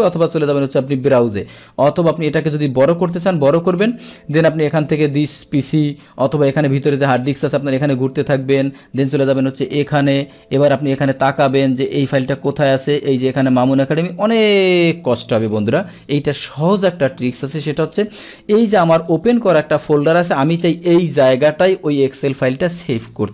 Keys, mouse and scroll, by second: 2.9 click, 4.6 click, 7.5 click, 7.7 click, 9.3 click, 10.6 click, 12.3 click, 15.2 click, 16.8 click, 18.1 Escape, 19.1 click, 19.8 click.